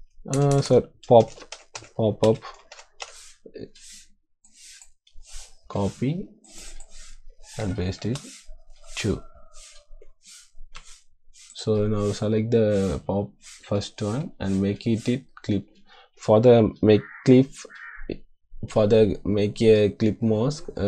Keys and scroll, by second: 0.9-3.0 typing, 5.4 ctrl+c, 7.5 ctrl+v, 8.0 space, 10.7 2.